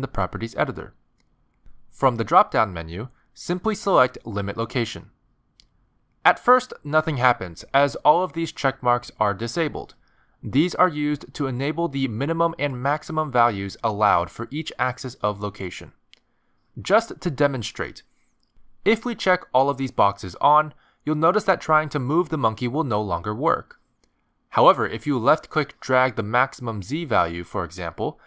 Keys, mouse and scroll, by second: 2.5 click, 8.0 middle click, 8.8 g, 18.2 middle click, 20.3 click, 20.9 click, 21.6 click, 22.2 click, 22.6 click, 23.2 click, 23.6 middle click, 24.0 g, 26.0 click.